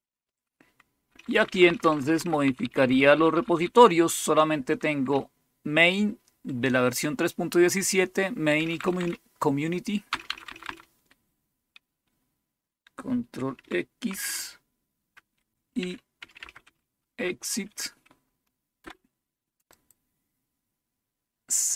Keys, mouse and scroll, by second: 1.0-1.6 Down, 1.4 Down, 1.8 Down, 1.9 Down, 2.1 Down, 2.4 Up, 2.5-5.5 typing, 8.5 Down, 8.7 Down, 8.9 Down, 10.0 Down, 10.2 Down, 10.4 Down, 10.5 Down, 14.0 ctrl+x, 15.5-17.1 typing, 18.7 Return, 19.7 click.